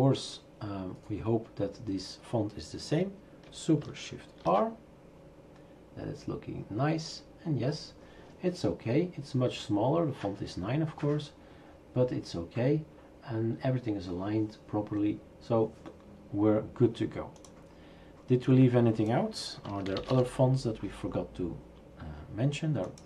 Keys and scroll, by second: 4.5 shift+super+r, 4.9 shift+super+r, 19.4-20.6 typing.